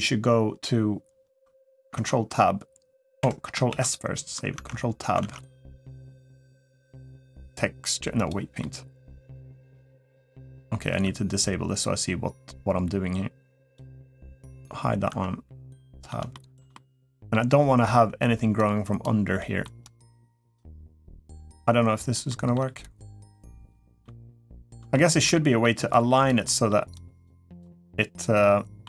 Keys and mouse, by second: 1.8 ctrl+Tab, 3.5 ctrl+s, 4.3 ctrl+Tab, 5.1 ctrl+Tab, 8.4-9.5 middle drag, 10.0 Tab, 10.6 Tab, 14.3 click, 14.9 Tab, 15.5 middle click, 16.1 shift+middle click, 16.5 middle click, 18.4 click, 19.2 middle click, 19.6 click, 20.5 middle click, 21.4 click, 22.1 middle click, 22.6 click, 23.8 middle click, 24.7 shift+middle click, 25.1 middle click, 25.7 click, 26.2 middle click, 27.3 click, 27.6-28.6 middle drag.